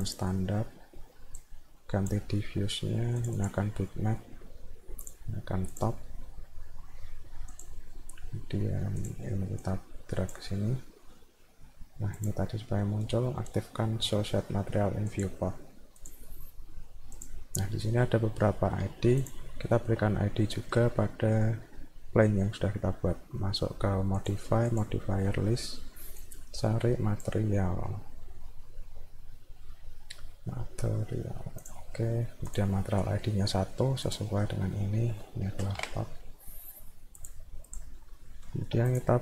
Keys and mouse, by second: 0.0 click, 1.4 click, 3.2 click, 3.4 click, 5.7 click, 7.6 click, 9.0 click, 9.6 click, 12.2 click, 15.1 click, 16.0 click, 17.2 click, 19.2 click, 19.7 alt+middle click, 20.4 alt+middle click, 24.2 click, 24.7 click, 26.2-27.2 drag, 31.7 click, 32.5 click, 34.1 click, 37.2 click, 37.7 click, 38.2 middle click, 38.5 alt+middle click, 38.9 click.